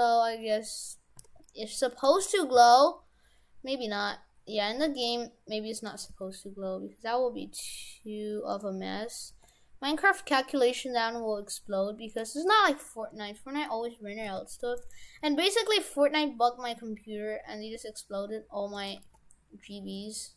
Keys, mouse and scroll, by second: 1.2 s, 2.6 s, 6.1 g, 9.3 g, 12.5-13.1 scroll up 3, 13.1 middle click, 14.3 s, 15.2 s, 18.2 s, 19.0 g.